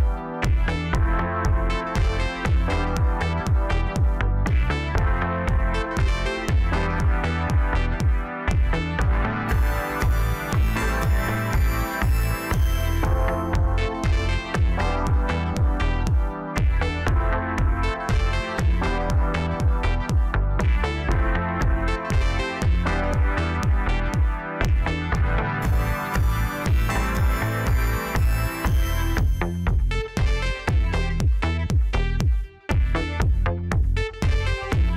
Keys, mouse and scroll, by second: 1.5 a, 2.8-4.8 drag, 4.8-6.7 scroll up 3, 8.3 click, 15.7 click, 16.2-16.8 scroll down 2, 16.8-18.9 middle drag, 18.9-20.7 drag, 20.7-21.9 middle drag, 21.9 KP_1, 23.2 g, 26.6 ctrl+r, 30.6-32.2 middle drag, 32.2 Tab, 32.5-33.3 scroll down 1, 33.3 ctrl+a.